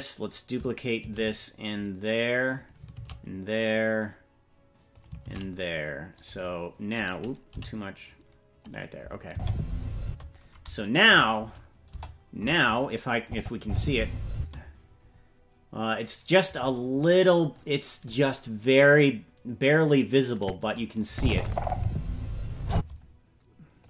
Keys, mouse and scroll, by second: 1.0 shift+d, 2.9 shift+d, 5.2 shift+d, 7.5 g, 9.2 space, 10.0 space, 11.0 KP_Decimal, 11.8 KP_0, 13.2 click, 13.6 space, 14.3 space, 15.8 click, 20.3 click, 21.0 space, 22.7 space, 23.8 click.